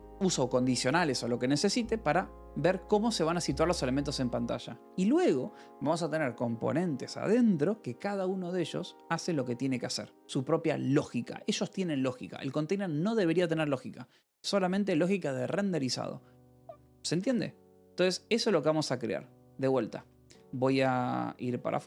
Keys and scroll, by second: 16.9 d, 17.3 Escape, 19.1 alt+p, 19.2-21.8 typing.